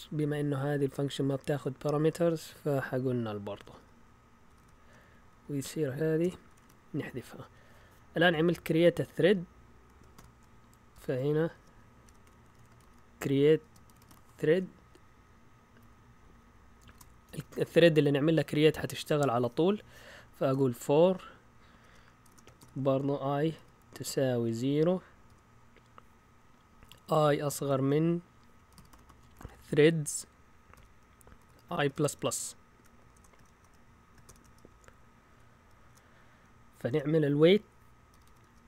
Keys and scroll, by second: 0.2 Down, 0.5 Down, 1.3 Up, 1.5 Up, 3.4-4.5 typing, 5.1 Down, 5.3 Down, 6.2 Escape, 6.5 typing, 7.1 Up, 8.7 Up, 9.0-14.9 typing, 15.8 Down, 16.0-17.4 typing, 20.4 typing, 21.8-22.2 typing, 23.5-25.3 typing, 26.8-27.7 typing, 28.7-33.1 typing, 33.4 shift+Tab, 34.2 shift+[, 34.6 Return, 35.8 Return, 36.2 Up, 36.9 Tab, 36.9-38.6 typing.